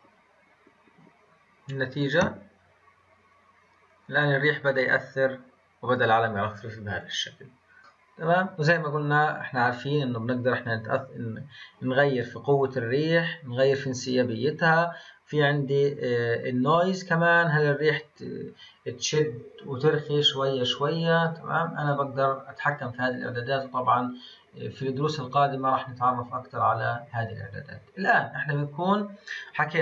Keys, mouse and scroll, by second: 7.3 scroll down 1, 7.8-9.2 middle drag, 9.2-22.3 drag, 22.3-22.6 scroll down 2, 24.4 scroll down 1, 25.1-26.8 scroll up 2, 29.7-29.8 drag.